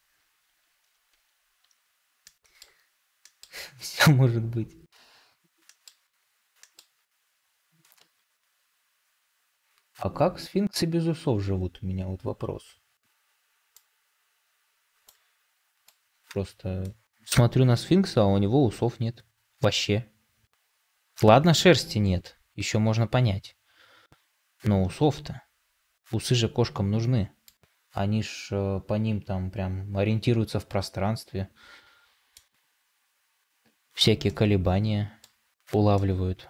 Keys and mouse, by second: 34.2-35.1 middle drag, 35.9-36.4 middle drag.